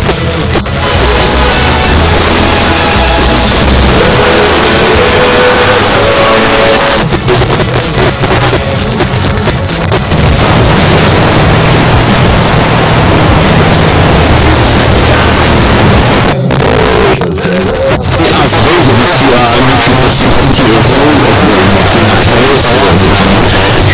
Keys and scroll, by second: 6.8 Page_Down, 16.0 Page_Down.